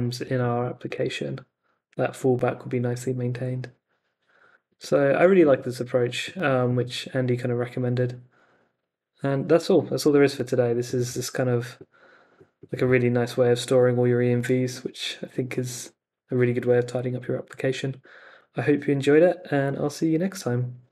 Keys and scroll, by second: 0.2 super+Tab, 0.8 super+r, 4.8 super+Tab.